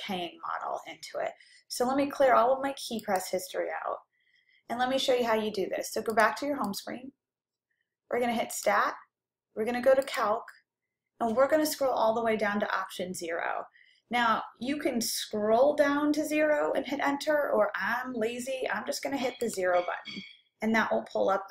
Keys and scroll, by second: 10.2 Right, 19.5 0.